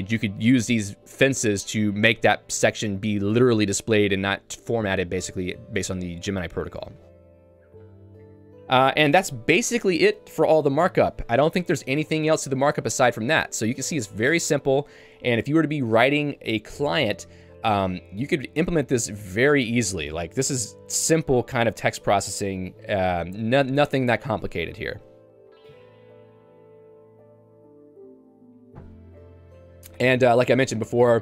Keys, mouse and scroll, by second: 30.3 Escape, 30.8 j.